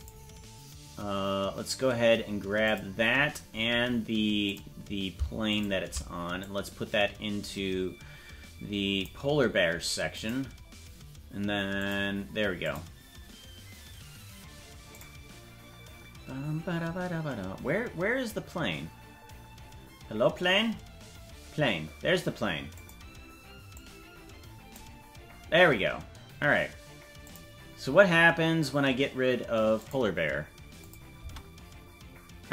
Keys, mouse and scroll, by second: 2.6 click, 3.3-3.9 scroll down 6, 4.4 click, 5.4 shift+click, 6.4-9.0 drag, 7.5-8.3 scroll up 6, 10.1 click, 11.7 click, 12.6 click, 14.9 click, 16.9 scroll down 1, 19.5 scroll up 3, 20.3-20.9 scroll down 9, 22.7 click, 23.7-24.7 drag, 26.3 scroll up 2, 27.2 click, 29.8 click, 30.8 click, 31.3 space.